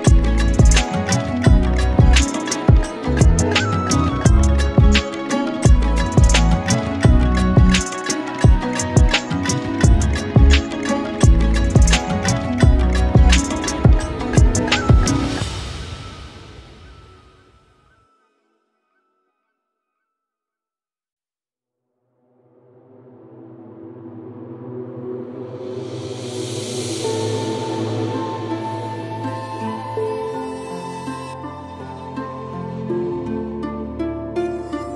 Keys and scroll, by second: 1.8 ctrl+z, 2.0 ctrl+space, 4.4 ctrl+z, 5.6 space, 7.6 ctrl+z, 10.3 space, 12.3 space, 14.0 space, 16.3 KP_3, 16.5 space, 20.4 space, 22.7 ctrl+z, 24.2 space, 26.2 space, 32.2 space.